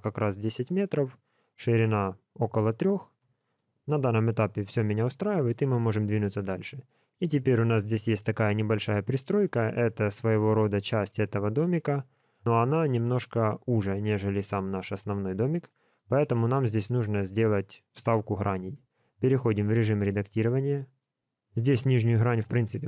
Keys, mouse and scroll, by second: 3.3 shift+middle click, 3.9 middle click, 11.6 middle click, 15.6 middle click, 16.1 scroll up 2, 18.7 Tab, 19.9 middle click, 21.5 click, 22.3 x.